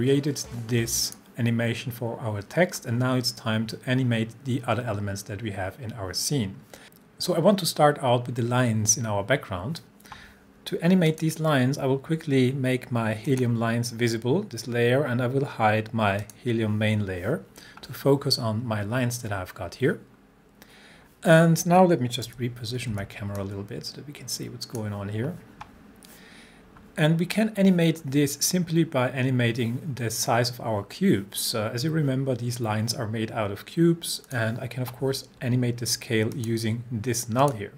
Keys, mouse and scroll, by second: 11.1 click, 13.3 click, 16.3 click, 22.3-22.9 typing, 23.4-24.9 drag, 34.3 click.